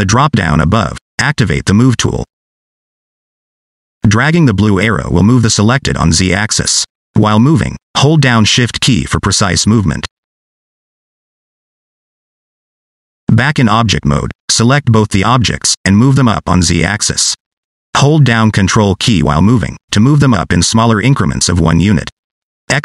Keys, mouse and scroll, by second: 1.9 click, 3.8 scroll up 2, 4.2 shift+middle click, 4.7-5.5 scroll up 1, 5.5 click, 11.8-12.5 scroll down 7, 12.5 Tab, 14.8 click, 15.5-15.9 scroll up 2, 16.1 shift+middle click, 16.4 scroll up 3, 16.6 scroll down 1, 16.9 shift+middle click, 17.6 click.